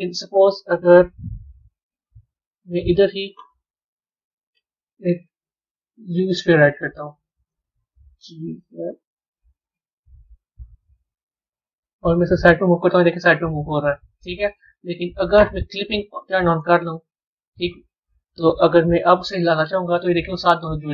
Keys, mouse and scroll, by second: 4.1 shift+a, 10.1-11.5 scroll down 2, 16.7 click.